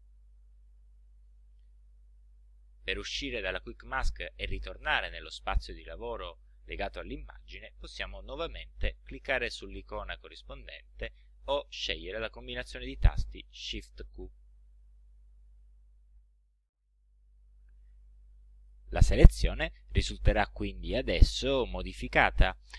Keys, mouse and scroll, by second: 14.7 shift+q.